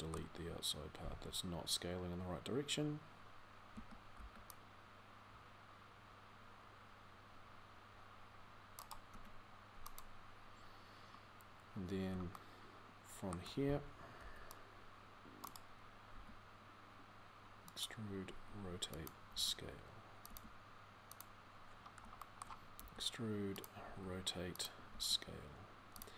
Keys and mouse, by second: 0.2-3.6 drag, 3.6 a, 3.9 c, 9.0 x, 12.6 middle click, 12.8 middle click, 13.9 c, 15.9 e, 18.1 r, 19.1 s, 20.1 g, 21.7 middle click, 23.7 r, 24.7 s.